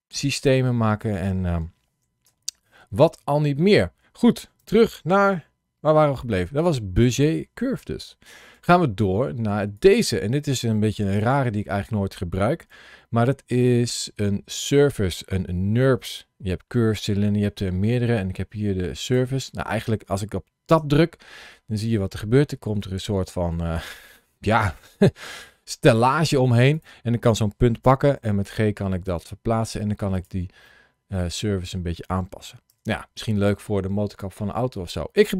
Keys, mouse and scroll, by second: 6.4 scroll down 1, 7.6 Tab, 8.6 shift+middle click, 9.6 click, 11.0 Tab, 11.7 Tab, 12.5 shift+a, 18.9 click, 19.4 click, 20.6 Tab, 21.8 middle click, 26.6 click, 28.0 g, 30.0 click, 30.5 middle click, 32.5 Tab, 33.1 middle click.